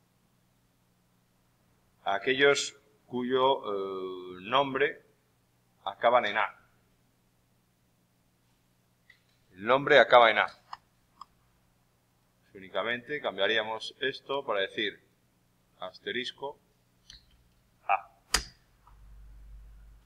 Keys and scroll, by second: 17.2 shift+=.